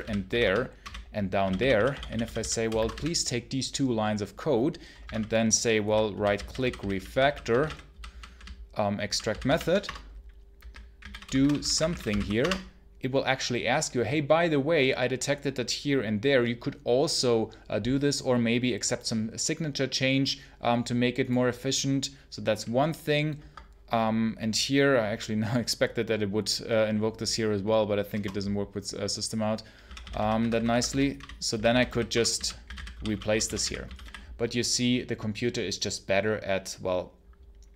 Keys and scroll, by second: 0.0-3.3 typing, 5.0 Menu, 5.8 Up, 6.0 Down, 6.2 Down, 6.6 Down, 7.5 Right, 7.8 Down, 8.0 Down, 9.1 Down, 9.7 Return, 23.2 Escape, 29.7-34.4 typing.